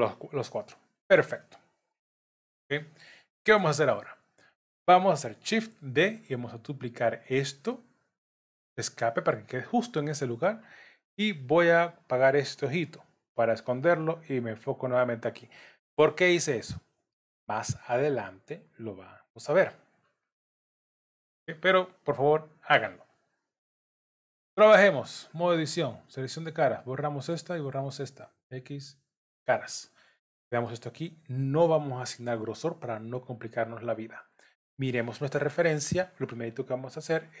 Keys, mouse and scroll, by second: 3.6 Tab, 4.0 middle click, 5.8 shift+d, 12.4 click, 13.3 middle click, 14.5 click, 21.0 middle click, 24.2 Tab, 25.5 3, 26.4 click, 26.8 middle click, 27.8 shift+click, 28.5 x, 29.9 middle click, 34.2 middle click, 35.3 scroll up 2, 37.3 scroll up 2.